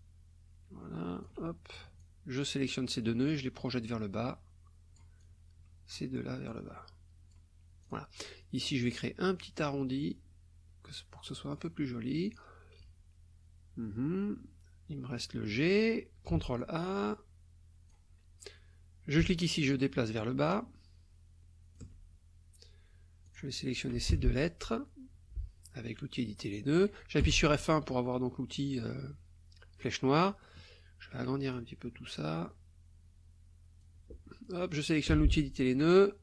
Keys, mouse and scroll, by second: 0.0-1.4 alt+drag, 2.0 click, 3.3-5.2 drag, 5.3 click, 6.5 click, 7.8 click, 9.4-11.7 drag, 12.2 click, 16.3 ctrl+a, 16.6-18.1 ctrl+drag, 19.2-22.0 alt+drag, 23.2 click, 23.7 shift+click, 27.2 F1, 27.9-30.0 drag, 30.1 click, 31.5-34.0 drag, 35.1 F2.